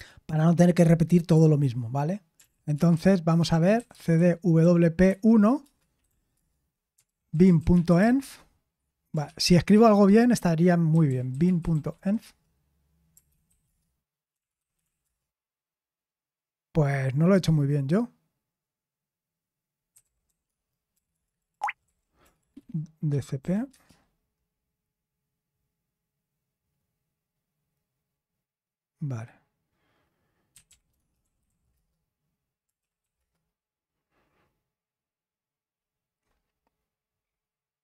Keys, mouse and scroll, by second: 3.6-15.0 typing, 21.5 BackSpace, 21.6 g, 23.7 typing, 31.4-33.5 typing.